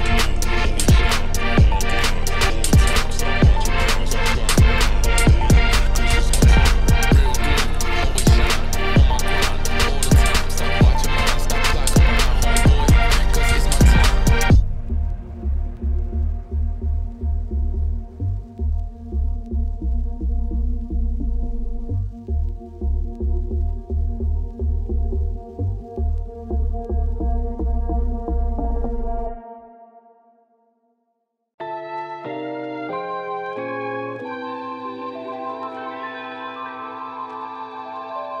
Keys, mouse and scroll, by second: 3.4 click, 4.1-5.2 drag, 6.6 Tab, 7.9-8.2 scroll up 1, 8.9 middle click, 9.4 Tab, 9.8-10.9 middle drag, 11.0-12.7 drag, 12.8 alt+click, 13.0-14.7 alt+shift+drag, 15.6 click, 16.9 click, 17.7-20.2 shift+drag, 20.7 shift+click, 21.1 middle click, 21.7 shift+click, 22.5 middle click, 23.0 shift+click, 23.2-24.3 middle drag, 24.3 click, 24.9 Tab, 25.3 middle click, 25.6 Tab, 26.1 z, 26.7 alt+click, 27.5 click, 29.6 click, 30.5 shift+click, 30.7-31.7 middle drag, 31.7 shift+click, 32.0 middle click, 32.8 shift+click, 33.4 click, 33.8 middle click, 34.0 Tab, 34.2 middle click, 34.3 z, 34.7 scroll down 2, 34.9 click, 35.0 middle click, 35.6 click, 35.8 right click, 36.3 scroll up 1, 36.5-38.4 shift+middle drag.